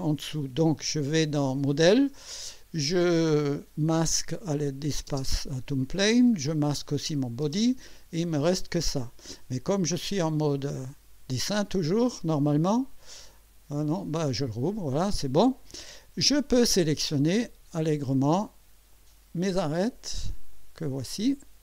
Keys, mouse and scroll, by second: 2.9 scroll down 1, 4.0 click, 5.1 space, 6.3-6.6 scroll up 1, 7.1 click, 7.4 space, 11.0 click, 12.7 click, 13.3-13.6 scroll down 1, 13.9 click, 14.9 scroll up 1, 15.4 right click, 17.4 click, 18.9 click, 20.5 click.